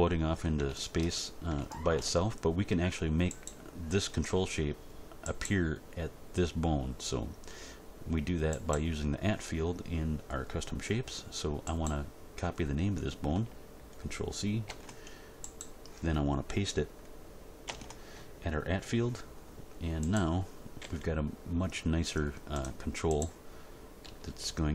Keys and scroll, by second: 14.6 ctrl+c, 17.6 ctrl+v, 20.8 g, 24.0 r.